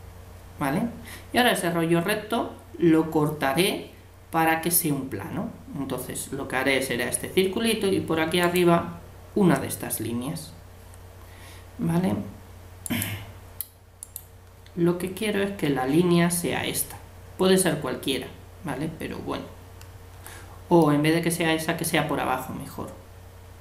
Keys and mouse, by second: 8.4-10.2 right drag, 12.8-15.8 right drag, 15.8-17.4 middle drag, 20.8-22.7 middle drag.